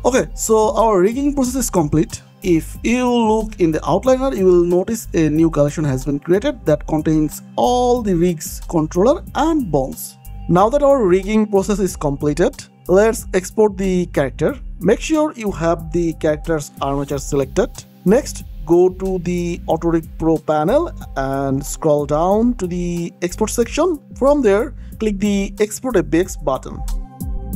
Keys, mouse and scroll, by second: 0.6 click, 1.0 middle click, 1.9 shift+middle click, 3.8-5.8 scroll down 1, 6.7 click, 8.3 middle click, 9.4 click, 15.1 click, 24.8-25.4 scroll down 1, 26.3 click, 27.0 ctrl+c, 27.4 click.